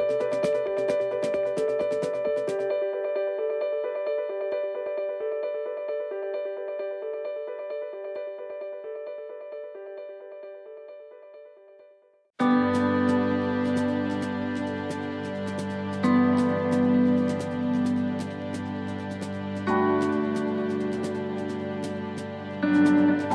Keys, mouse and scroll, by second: 0.9 right click, 1.4 alt+shift+right click, 1.9 right click, 3.8 alt+shift+right click, 4.1 middle click, 5.4 middle click, 7.4 click, 8.6 middle click, 10.1 alt+shift+right click, 10.7 middle click, 12.5 alt+shift+right click, 13.3 middle click, 15.0 click, 19.1 middle click, 20.2 alt+shift+right click, 21.2 ctrl+z, 21.5 middle click, 23.2 click.